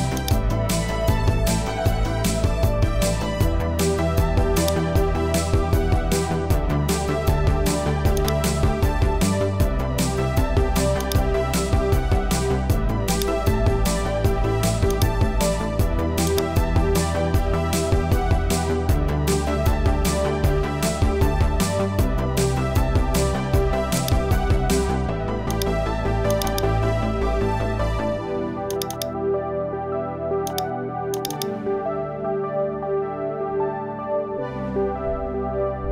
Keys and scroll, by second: 2.2 Return.